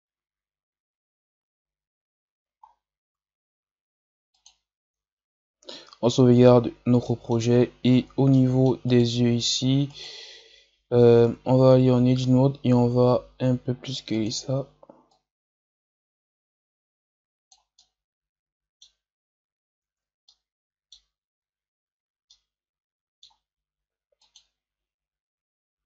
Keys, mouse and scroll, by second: 2.5 scroll down 6, 4.4-4.8 drag, 6.5 scroll down 4, 6.9-7.4 middle drag, 7.4-7.9 scroll up 4, 7.9 scroll down 3, 8.2 middle click, 8.9-11.2 right drag, 11.2 Tab, 11.7 a, 11.9 a, 12.7 s, 15.1-17.7 drag, 17.7-19.8 middle drag, 19.8 Tab, 20.2-21.1 middle drag, 21.1 a, 21.9-22.2 scroll down 4, 22.2-25.2 middle drag, 25.2-25.8 drag.